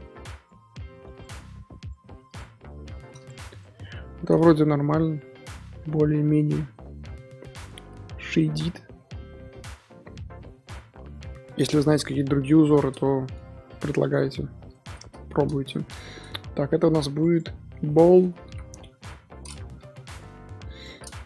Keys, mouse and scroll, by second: 0.3 click, 1.1-1.9 drag, 2.2-3.6 drag, 3.7-4.4 scroll down 2, 3.9-4.2 middle drag, 4.4-6.3 middle drag, 6.3-6.7 scroll up 3, 6.7-7.6 middle drag, 7.6-7.9 scroll up 3, 7.9-8.3 middle drag, 8.3-8.7 scroll up 3, 8.7 middle drag, 8.9-9.7 scroll up 1, 9.7 scroll down 2, 9.8-11.1 middle drag, 11.1-11.4 scroll down 3, 11.4-12.3 middle drag, 12.3 KP_7, 14.6 click, 16.2-17.1 scroll down 3, 17.1 click, 17.3-18.6 drag, 18.6 l.